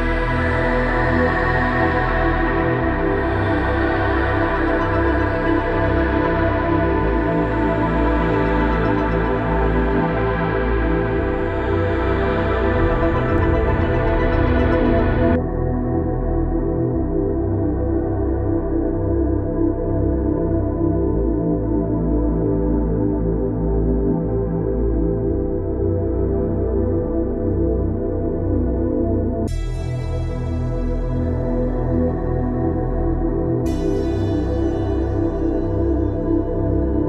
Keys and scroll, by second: 31.6 shift+Down.